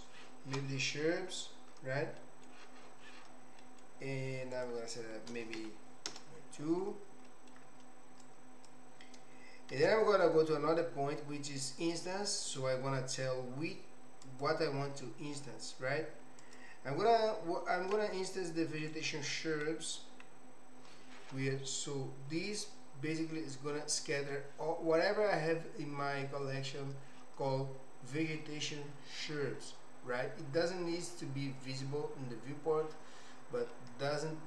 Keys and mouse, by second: 3.6 middle click, 4.5-6.8 drag, 7.2 middle click, 8.3 click, 9.7 shift+a, 14.2 click, 16.4-32.4 drag, 34.2-34.4 middle drag.